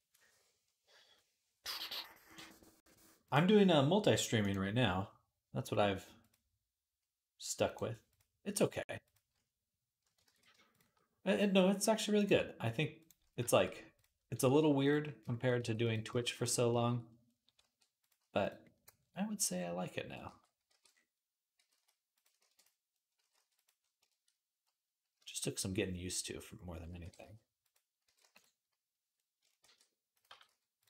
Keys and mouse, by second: 10.1 ctrl+z, 10.6-18.5 right drag, 12.0-13.8 drag, 12.0-14.9 middle drag, 14.3 g, 15.4 g, 17.4 r, 18.0 g, 20.1 alt+g, 20.5 alt+r, 20.8-22.4 right drag, 21.4 g, 22.2 shift+d, 22.4-23.6 middle drag, 23.0 g, 23.7 shift+middle click, 24.6 middle click, 25.0 shift+click, 25.3 middle click, 25.6 middle click, 26.2-29.8 middle drag, 26.8 r, 27.8 g, 29.5 shift+d, 29.8-30.8 drag, 30.1 g.